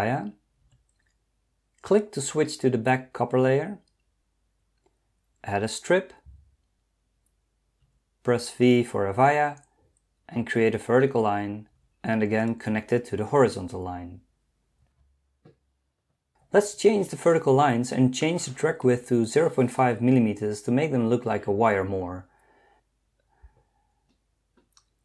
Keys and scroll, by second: 0.7 v, 7.8 v, 11.8 v.